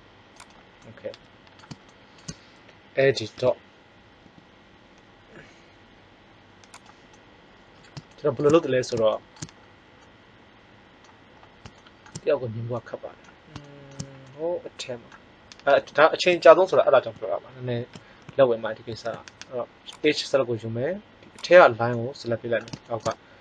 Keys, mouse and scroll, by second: 0.4 click, 3.3 KP_1, 4.2 g, 18.9 ctrl+Tab, 21.3 click, 21.9-22.9 right drag.